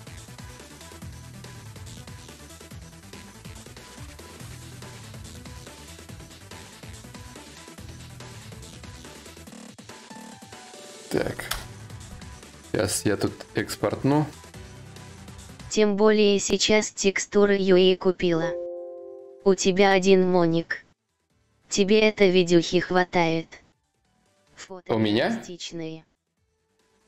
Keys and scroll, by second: 11.0 Return.